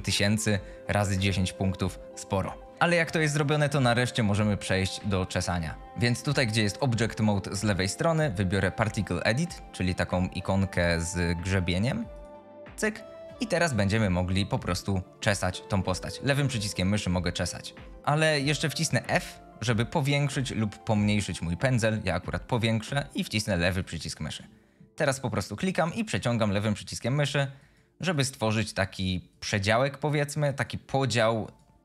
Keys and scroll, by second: 19.4 f.